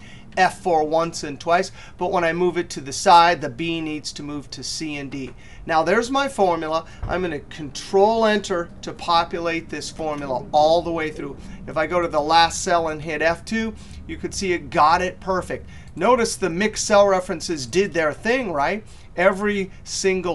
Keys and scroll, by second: 0.4 F4, 1.2 F4, 7.8 ctrl+Return.